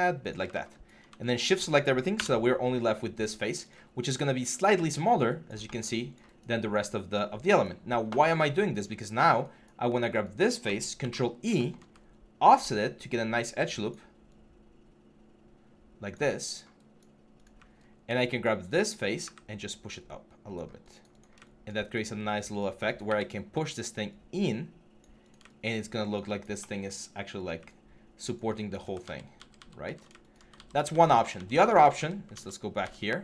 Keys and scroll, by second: 1.9 BackSpace, 10.8 ctrl+e, 28.8 ctrl+z, 30.3 ctrl+z, 33.1 ctrl+z.